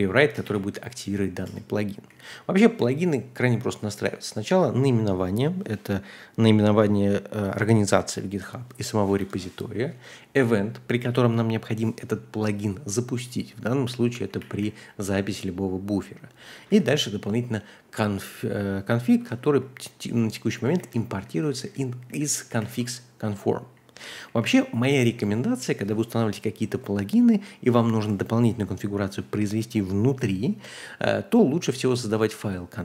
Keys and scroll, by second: 0.4 w, 1.4 Return, 2.1 k, 2.3 k, 2.7 k, 3.7 shift+v, 9.2 ⟲, 9.7 j, 13.9-17.6 typing, 19.1-24.7 typing, 20.7 ctrl+h, 22.6 ctrl+l.